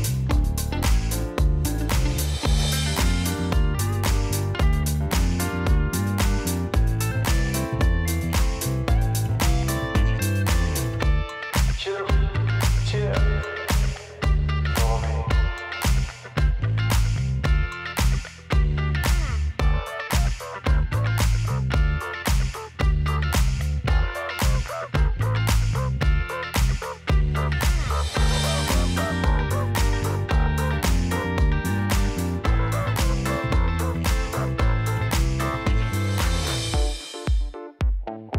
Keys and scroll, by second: 1.7 space, 4.9 space, 5.7 ctrl+s, 6.1 space, 6.7 v, 13.4 space, 32.2 space, 32.9 ctrl+s.